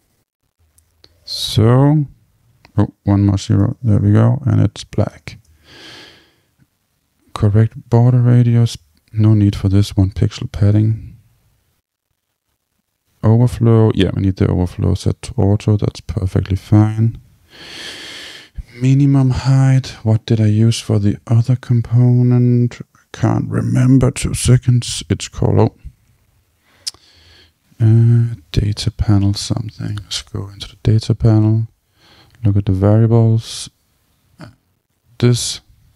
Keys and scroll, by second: 0.9 Return, 3.6 Return, 10.1 Tab, 24.4 super+space, 27.2 super+k, 29.5 Down, 29.9 Return.